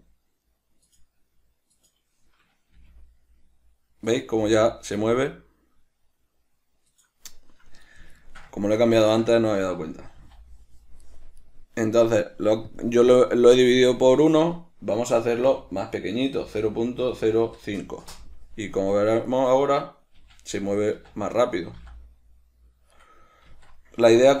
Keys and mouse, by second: 1.1 right click, 2.0 right click, 3.0 g, 4.4 right click, 4.6 g, 7.3 right click, 8.5-11.4 ctrl+shift+middle drag, 10.4 g, 11.7 right click, 13.0-19.0 drag, 19.0 right click, 19.5 right click, 20.4 g, 21.7 right click, 22.0 g, 23.3 right click, 23.8 alt+q.